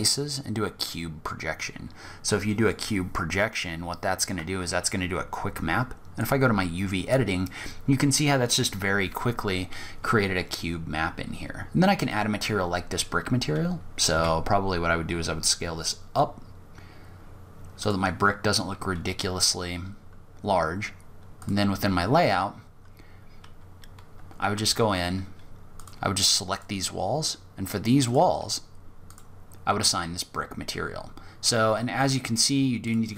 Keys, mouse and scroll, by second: 3.5-4.1 scroll up 4, 4.1-5.4 scroll down 2, 5.6 click, 5.6-6.3 scroll down 2, 6.3-6.9 scroll up 5, 9.0-9.8 scroll down 3, 9.9-10.3 scroll up 3, 10.8-11.4 scroll down 2, 11.4-12.3 scroll up 2, 12.3-13.3 scroll down 1, 13.3-13.9 scroll down 1, 13.3 s, 17.3 scroll down 3, 18.4-19.3 scroll down 2, 18.8-19.3 scroll up 1, 19.3 scroll down 1, 19.5 scroll down 1, 19.6-20.6 scroll up 1, 20.6 click, 20.6-21.4 scroll up 1, 21.6 scroll down 2, 22.1 scroll up 1, 23.8 Tab, 25.0 click, 25.7 click, 27.2 click, 32.0 click.